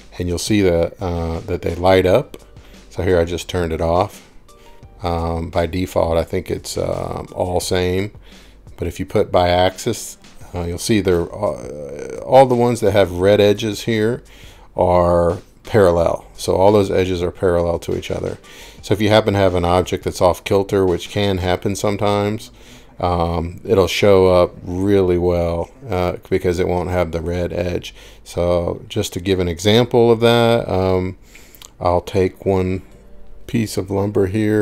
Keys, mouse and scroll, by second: 1.0-1.6 scroll, 2.8 scroll, 3.8 click, 5.7 click, 10.8-12.3 scroll, 14.9-15.8 scroll, 16.4 scroll, 20.3 scroll, 21.5 click, 22.6 middle click, 22.8 middle click, 23.3 middle click, 24.5 middle click, 24.7 middle click, 24.8 middle click, 25.8 middle click, 27.4 middle click, 27.5 middle click, 27.5-28.2 scroll, 28.9 click, 29.8 click, 31.6 click, 32.5 click.